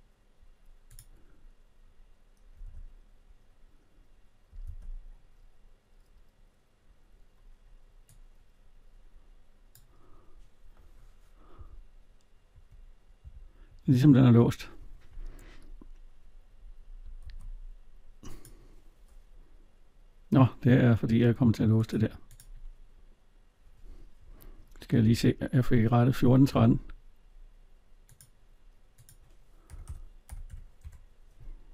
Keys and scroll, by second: 2.4 alt+Tab, 11.3 Right, 12.3 Left, 13.0 Right, 13.5 Left, 17.0 ctrl+z, 24.8 alt+Tab, 30.6 Return.